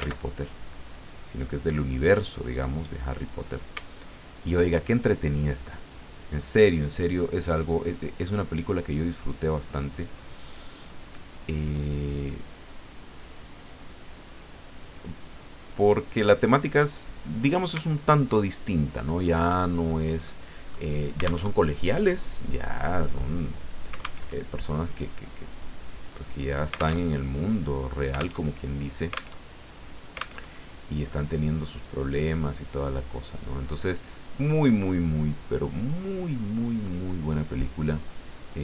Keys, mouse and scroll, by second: 0.0 ctrl+z, 0.8 click, 1.2-3.7 drag, 4.0-4.5 ctrl+scroll up 2, 5.8 click, 9.3 click, 12.2-13.5 drag, 14.8-17.7 drag, 17.9-18.3 ctrl+scroll down 2, 19.2 ctrl+scroll down 2, 20.2 middle click, 21.4 alt+Tab, 24.2 alt+Tab, 26.1 click, 27.0 alt+Tab, 28.4 alt+Tab, 29.4 alt+Tab, 30.4 alt+Tab, 31.8-34.7 drag, 35.7 click, 36.8 scroll up 2, 38.1-38.6 drag.